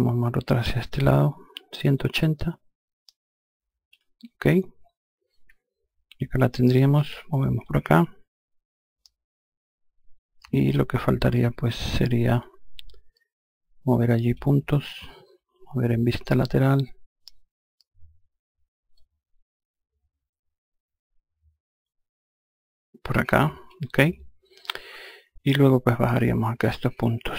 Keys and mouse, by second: 0.5 shift+click, 6.4 e, 7.1 click, 15.7 F3, 18.4 click.